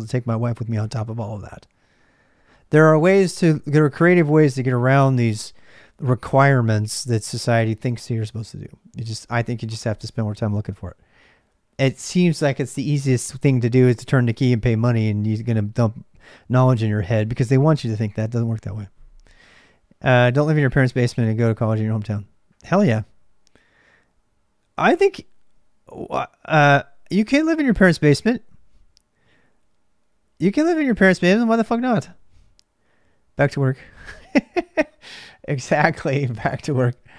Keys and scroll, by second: 0.0-37.1 typing.